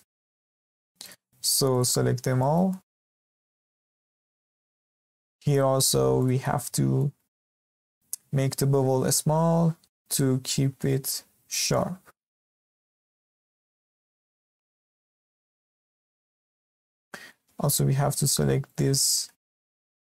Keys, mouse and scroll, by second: 1.0 alt+click, 1.7 alt+shift+click, 2.1 scroll down 4, 2.4-3.4 shift+middle drag, 3.4 scroll up 2, 3.7-4.6 shift+middle drag, 4.6 alt+shift+click, 4.9-6.2 middle drag, 6.2 alt+shift+click, 6.5 scroll up 1, 6.7-8.2 shift+middle drag, 8.2 ctrl+b, 14.2-14.5 scroll down 2, 14.5-16.3 shift+middle drag, 16.3 scroll up 2, 16.5-18.1 shift+middle drag, 18.1 alt+click, 18.6 alt+shift+click, 19.2-20.1 shift+middle drag.